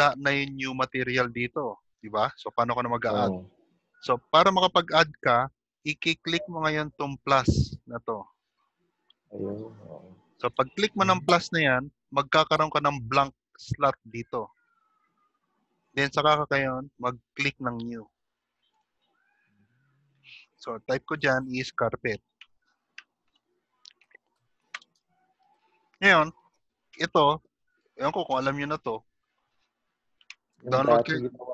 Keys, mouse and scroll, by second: 12.2 click, 18.8 click.